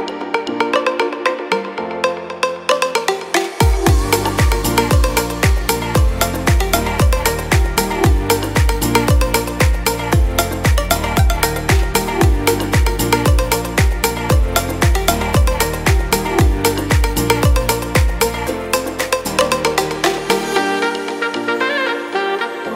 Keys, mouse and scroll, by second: 17.3 click.